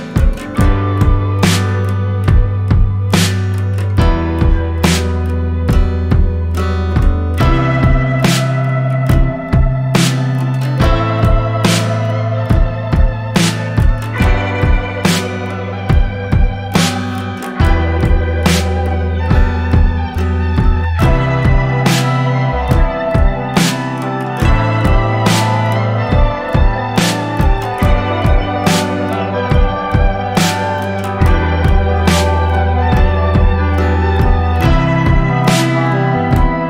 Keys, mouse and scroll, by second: 3.9-4.3 alt+scroll up 1, 4.6 click, 5.1 alt+scroll up 1, 5.9 click, 8.6-8.9 alt+scroll down 1, 9.1 click, 9.4 scroll down 1, 10.2-12.3 drag, 13.2 shift+click, 13.7 shift+right click, 14.5-18.4 drag, 18.4 right click, 19.2 click, 19.6-20.1 alt+scroll down 1, 20.2 click, 21.3-28.3 alt+shift+drag, 28.3 ctrl+d, 29.2 click, 29.9-31.6 alt+drag, 31.6 right click, 32.3-36.6 drag.